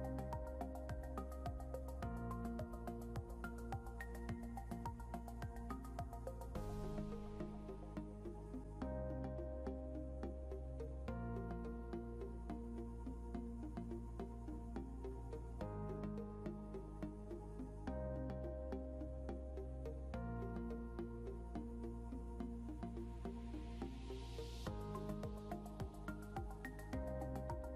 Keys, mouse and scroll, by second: 7.3 scroll up 1, 8.6-9.3 scroll up 1, 13.5 click, 14.4-15.0 typing, 15.8 click, 16.9-17.2 typing, 17.5 Return, 19.4 0, 20.6 ctrl+r.